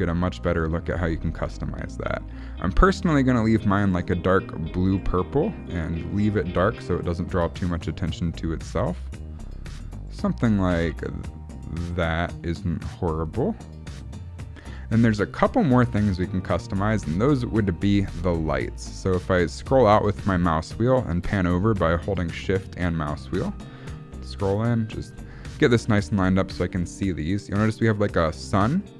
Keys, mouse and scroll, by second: 4.9 click, 17.2-18.0 scroll down 2, 18.0 shift+middle click, 18.8-19.2 scroll up 2, 19.3-19.7 scroll down 3, 19.5 scroll up 1, 19.7 scroll down 1, 19.8 scroll down 1, 20.1 scroll up 2, 20.4-20.9 scroll down 1, 20.9 shift+middle click, 23.7-24.1 scroll up 3, 24.3 shift+middle click.